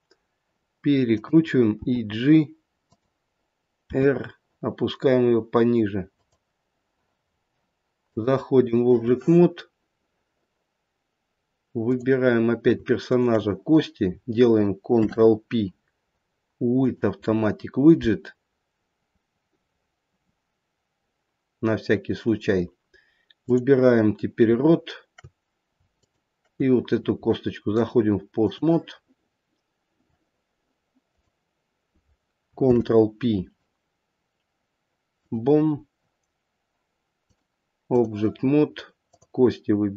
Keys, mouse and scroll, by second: 1.8 g, 3.9 r, 8.0 click, 11.8 click, 13.0 shift+click, 14.9 ctrl+p, 23.4 click, 25.9 shift+click, 27.7 click, 31.0 click, 32.6 ctrl+p, 37.2 click, 39.0 click.